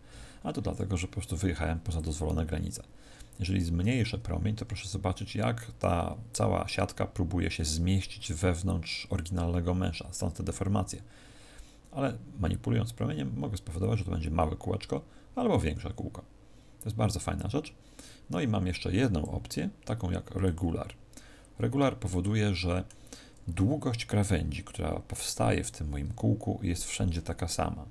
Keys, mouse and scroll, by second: 1.9 click, 20.4 click, 21.8 middle click.